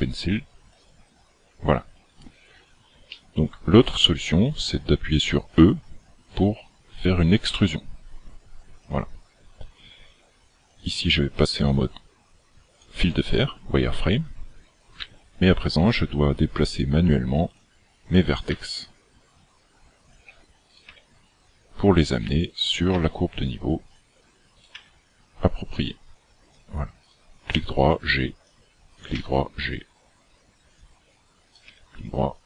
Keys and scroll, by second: 7.5 e, 15.0 g, 18.6 g, 20.9 g, 23.0 g, 24.7 g, 27.5 g, 29.2 g, 31.7 g.